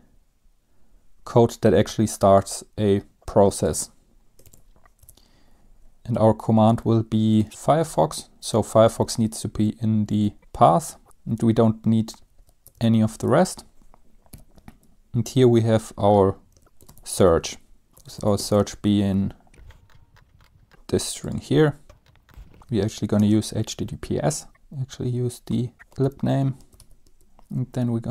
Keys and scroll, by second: 3.2 ctrl+c, 4.5 ctrl+v, 4.8 Right, 4.8 BackSpace, 5.1 Return, 5.6-6.6 Right, 7.4-7.9 typing, 8.7 Left, 8.9 Left, 9.1 Right, 9.3 Right, 9.7 Right, 10.1 Right, 10.4 Right, 10.4 Left, 10.6 Right, 11.7 Right, 12.7 shift+Right, 12.8-14.9 typing, 13.6 Left, 16.6-20.1 typing, 22.5-27.4 typing, 22.6 Right, 22.6 Right, 22.7 Right, 22.9 Right.